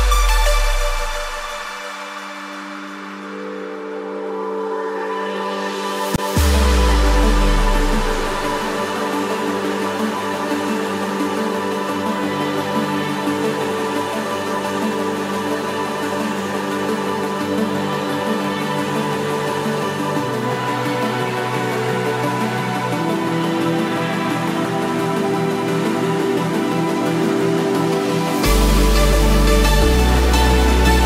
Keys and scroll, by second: 12.5 ctrl+-, 12.6 ctrl+space, 13.5 ctrl+=, 15.8 ctrl+-, 16.5 ctrl+=.